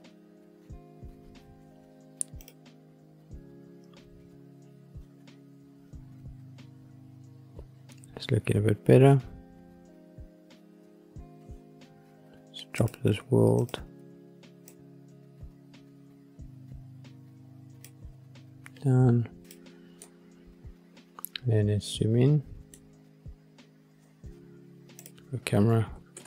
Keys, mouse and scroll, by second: 0.8-3.5 scroll down 2, 3.5 click, 12.7 click, 13.5 click, 19.4 click, 19.9-22.8 middle drag, 22.9-23.6 scroll up 1, 23.6 scroll up 1, 24.9 click, 26.1 ctrl+alt+KP_0.